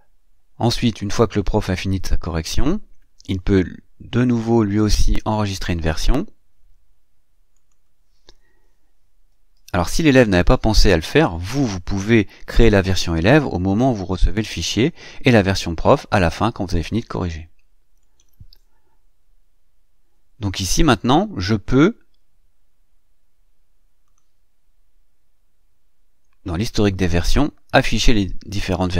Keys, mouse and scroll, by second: 4.5 click, 7.3 click, 8.9-10.1 typing, 17.8-24.2 drag, 27.6 click.